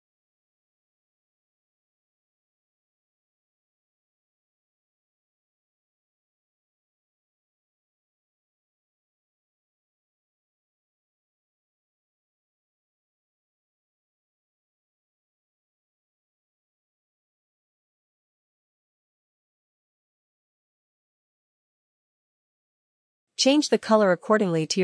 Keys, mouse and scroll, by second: 14.1-21.7 drag, 22.6 click.